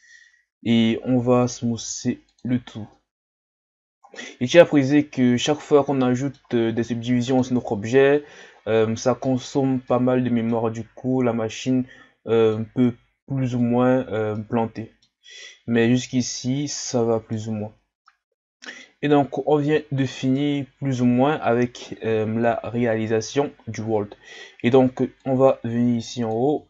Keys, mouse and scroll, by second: 4.1-4.9 scroll down 1, 4.9-7.8 middle drag, 7.8-8.6 scroll up 2, 8.6-9.2 scroll down 1, 9.2-9.8 shift+scroll up 3, 9.8-15.6 middle drag, 15.6 scroll down 1, 16.1-19.9 middle drag, 19.9 shift+scroll down 1, 20.3-22.5 middle drag, 22.5 KP_1, 25.2-26.0 drag, 26.2-26.6 drag.